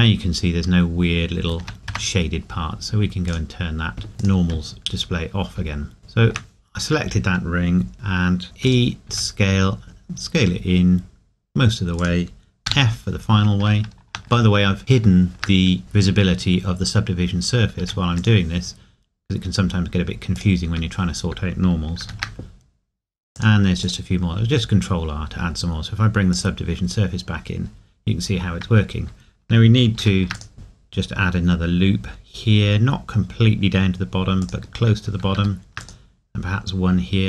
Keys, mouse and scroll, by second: 1.6 Tab, 6.0 shift+middle click, 6.6 scroll up 1, 8.4 e, 8.7 click, 9.1 s, 12.0 click, 12.7 f, 17.5 f, 17.8 ctrl+r, 18.2 click, 22.0 ctrl+r, 22.6 scroll up 1, 23.4 click, 26.5 click, 27.8 scroll down 1, 29.4-30.0 scroll down 1, 30.0 ctrl+r, 34.4 click, 35.0 scroll down 1, 35.4 ctrl+r, 36.0 click.